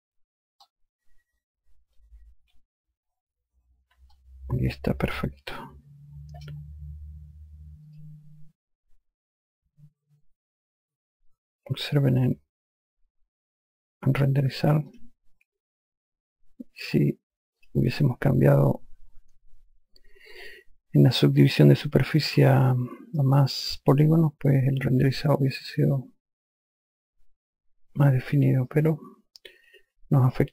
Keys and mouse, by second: 0.9 alt+click, 4.4 click, 8.2 click, 15.2 click, 17.9 click, 25.0 click, 29.0 alt+click.